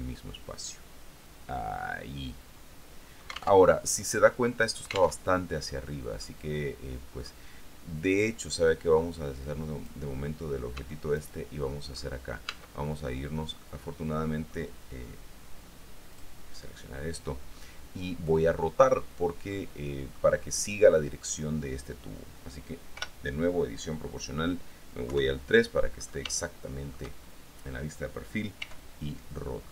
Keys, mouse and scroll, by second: 3.8 alt+Tab, 5.5 alt+Tab, 5.9-6.4 scroll down 2, 6.4-7.6 drag, 8.9-10.2 drag, 11.0 Tab, 11.4 right click, 12.1-13.3 scroll up 1, 12.7 Tab, 13.8-14.9 drag, 16.3 click, 17.0 click, 17.6-18.0 scroll down 1, 19.7 click, 20.5-21.2 scroll down 2, 23.2 o, 25.3 KP_3, 26.1-26.6 scroll up 3, 26.6-27.6 shift+middle drag, 28.8 r.